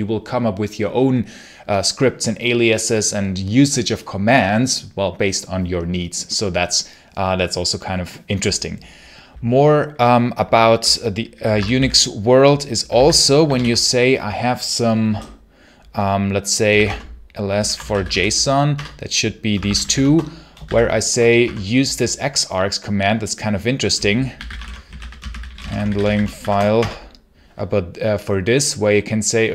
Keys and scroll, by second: 11.3 Escape, 11.4 b, 11.6 b, 12.8 ctrl+c, 13.4 ctrl+l, 16.3-21.3 typing, 18.6 Return, 24.0-26.7 typing.